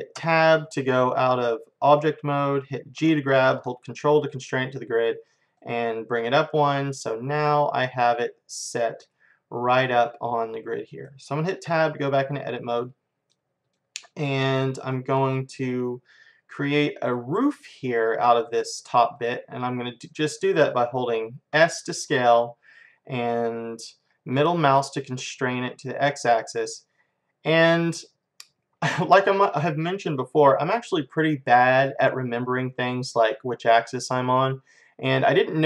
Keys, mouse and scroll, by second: 0.2 Tab, 3.0 g, 6.7-8.5 middle drag, 8.7-10.4 middle drag, 11.7 Tab, 12.5-15.7 middle drag, 16.6-21.1 middle drag, 21.6 s.